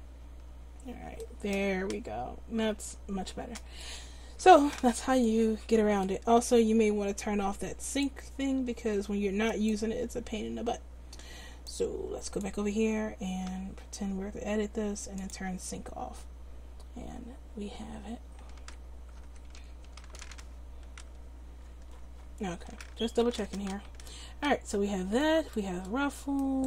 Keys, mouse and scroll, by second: 0.3 Tab, 11.7 click, 13.5 Tab, 18.6 Tab, 19.2 Tab, 19.6 a, 19.8 a, 21.0 n, 22.5 n, 23.3 Tab, 26.4 click.